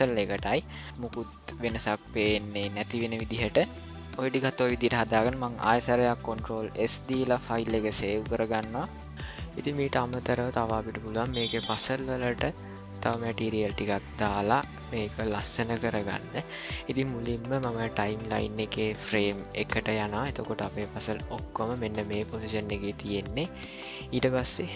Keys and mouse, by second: 0.0 middle click, 0.9-3.6 drag, 6.7 ctrl+s, 9.1 n, 18.3-20.2 drag, 21.7-22.5 shift+middle drag, 23.3-24.1 middle drag.